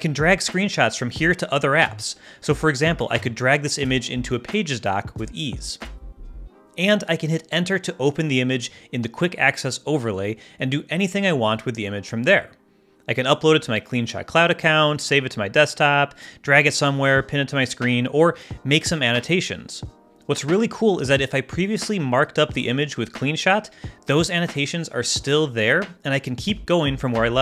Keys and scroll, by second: 7.1 super+h, 7.7 ctrl+alt+super+h, 7.9 ctrl+alt+super+z, 9.5 Right, 9.9 Return.